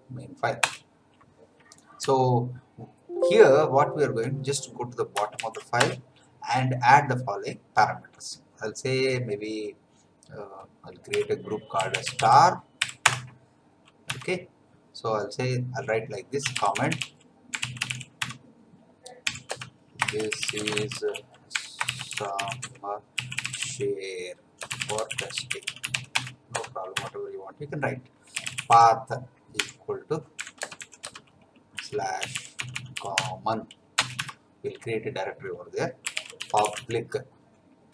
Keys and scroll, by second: 0.6 Return, 2.0 Down, 5.3 shift+a, 5.8 Return, 11.1-12.7 typing, 13.0 Return, 14.0 Tab, 16.2-26.5 typing, 26.9 Tab, 28.1-33.7 typing, 34.0 Return, 34.2 Tab, 35.8-37.9 typing.